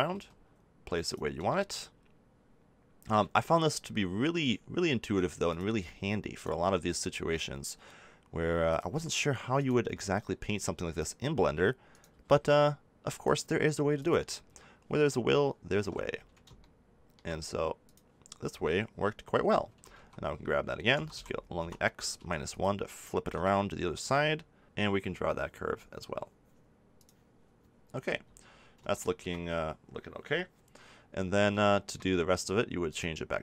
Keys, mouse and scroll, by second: 0.1 g, 5.4 g, 8.7 click, 9.7 g, 12.1 g, 15.8 ctrl+z, 19.4 click, 19.6 a, 19.9 a, 20.9 s, 22.5-23.5 drag, 24.6 g, 28.5 click, 28.9-31.8 middle drag.